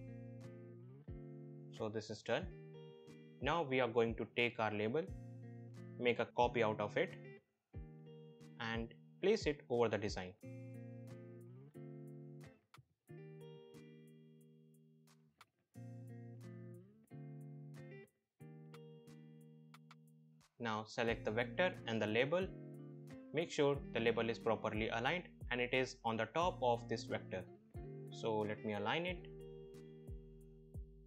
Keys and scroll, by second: 7.6 ctrl+c, 7.9 ctrl+v.